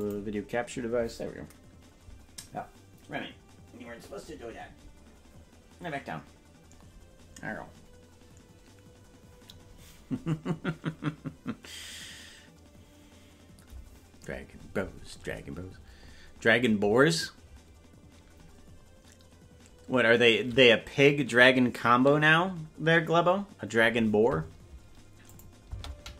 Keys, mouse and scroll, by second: 25.3 click.